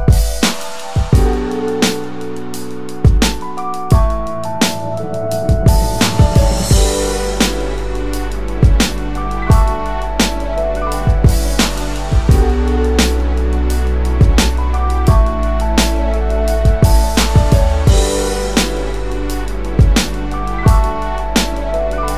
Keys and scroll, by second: 1.8 alt+shift+space, 2.3 alt+shift+space, 15.1 space.